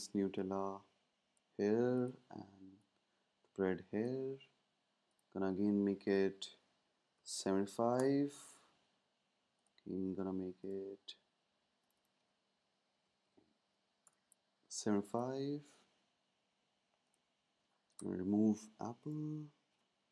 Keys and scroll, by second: 6.0 Tab, 6.8-7.8 typing, 7.9 Return, 12.8-13.7 typing, 14.0 Return, 16.8-18.0 typing.